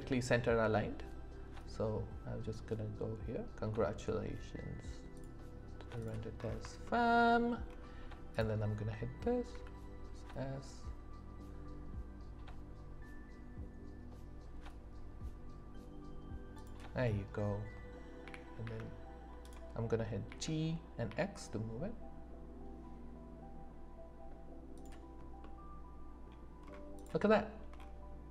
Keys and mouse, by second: 1.9-5.1 drag, 5.1 right click, 6.0 right click, 6.3 middle click, 6.8 shift+drag, 8.3 click, 9.5 s, 18.2 g, 18.6 z, 19.4 click, 20.2 g, 21.0 x, 24.7 click, 25.4 middle click, 27.3 shift+drag.